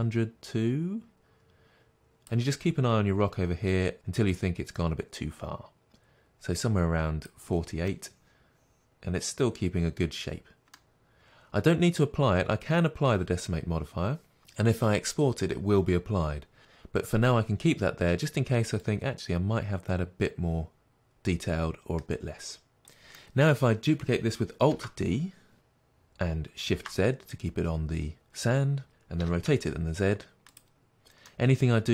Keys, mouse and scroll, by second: 7.8-18.9 middle drag, 18.9-23.1 drag, 23.1-24.6 middle drag, 24.7 alt+d, 28.1 middle click, 28.9 click, 29.2 r, 30.6 click, 30.7-31.9 middle drag.